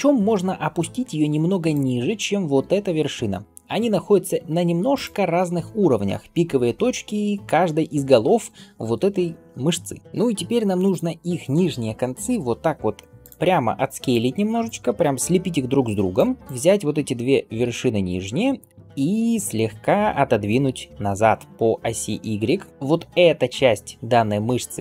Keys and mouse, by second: 3.0 g, 10.0-13.1 drag, 12.4 s, 13.1-14.5 middle drag, 13.5 s, 14.5-16.1 drag, 15.1 s, 16.1-19.2 middle drag, 16.4-22.7 drag, 20.5 g, 22.7-24.8 middle drag.